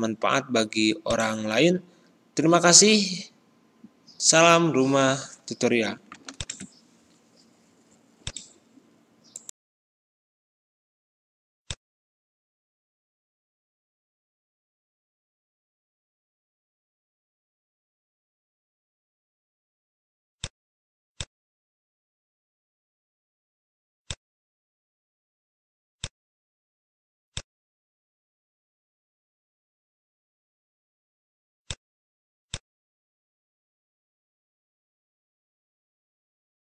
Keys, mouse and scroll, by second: 13.4-14.9 ctrl+scroll down 1, 16.5-17.4 scroll up 1, 20.3-24.9 drag, 24.9 ctrl+z, 26.0 click, 27.7 ctrl+a, 31.6 click, 32.9-34.2 ctrl+scroll down 1.